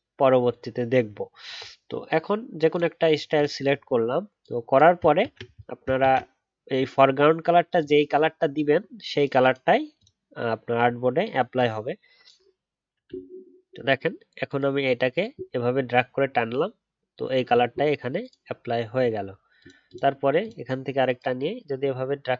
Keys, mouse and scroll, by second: 6.0 ctrl+z.